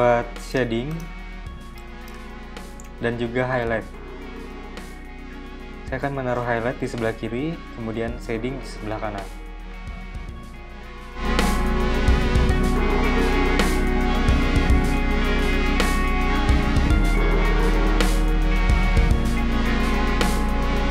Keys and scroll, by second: 0.7 z, 1.3 v, 10.4 p, 17.8 v.